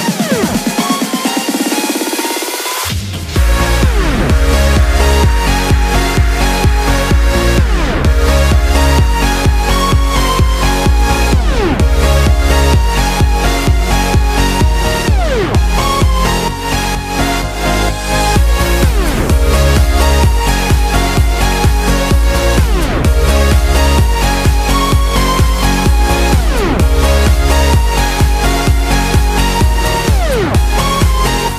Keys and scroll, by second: 19.4 super+t.